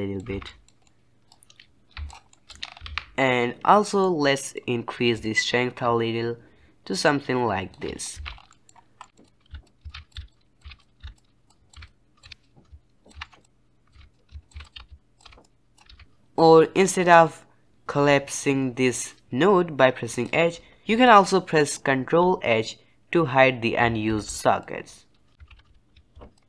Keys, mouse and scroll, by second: 0.2 alt+a, 0.4 middle click, 1.2 click, 2.2 shift+middle click, 2.5 scroll up 4, 2.8 alt+a, 3.9-5.1 middle drag, 5.1-8.1 shift+drag, 8.1 alt+a, 8.2 scroll down 2, 8.4-9.2 middle drag, 9.2 click, 9.5 h, 9.6 click, 9.9 alt+a, 10.1 click, 10.1 h, 10.3 click, 10.6 alt+a, 10.7 click, 11.0 h, 11.1 drag, 11.4 h, 11.4 drag, 11.7 alt+a, 11.8 click, 12.2 alt+a, 12.4 click, 13.1 alt+a, 13.2 scroll down 2, 13.2 middle click, 13.4 click, 13.9 alt+a, 14.1 click, 14.5 alt+a, 14.6 click, 14.7 g, 15.2 alt+a, 15.4 click, 15.8 alt+a, 16.6-19.8 scroll up 5, 20.0 click, 20.8 ctrl+h, 24.0 ctrl+h, 24.5-25.3 drag, 25.5 ctrl+h, 25.6 ctrl+h, 26.1 ctrl+h, 26.3 click.